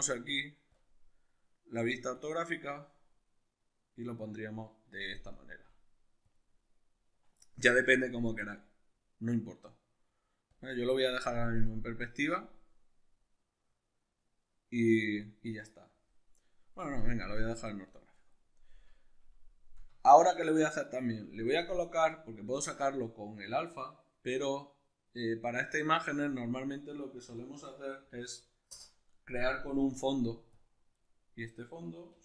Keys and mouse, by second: 5.5 g, 8.1-30.6 drag, 20.1 shift+a, 31.1-32.2 middle drag, 31.9 g.